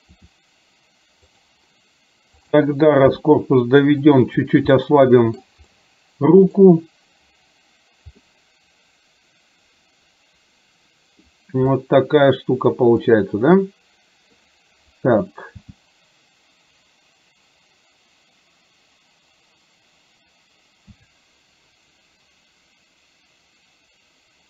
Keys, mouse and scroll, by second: 0.1 r, 2.4 click, 3.2 g, 4.9 scroll up 1, 5.0-5.5 middle drag, 5.7 scroll up 1, 5.9 middle click, 6.6 scroll down 1, 8.2-11.4 middle drag, 11.9-14.5 middle drag, 15.6 g.